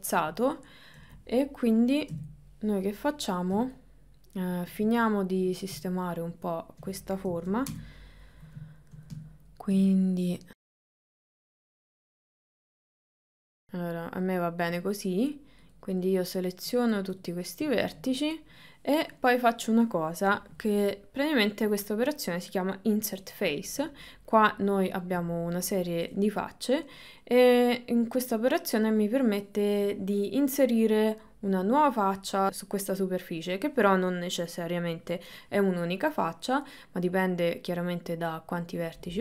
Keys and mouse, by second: 1.0 KP_3, 2.1 KP_1, 3.7 shift+middle click, 5.9-6.9 ctrl+middle drag, 7.3 KP_1, 7.7 KP_9, 8.8 ctrl+middle click, 9.3 shift+middle click, 10.9 g, 11.4 g, 12.3 g, 12.9 ctrl+middle click, 13.1 middle click, 17.8-19.1 middle drag, 20.7 middle click, 23.6-24.9 middle drag, 26.1-27.1 middle drag, 32.5 middle click, 36.2 middle click.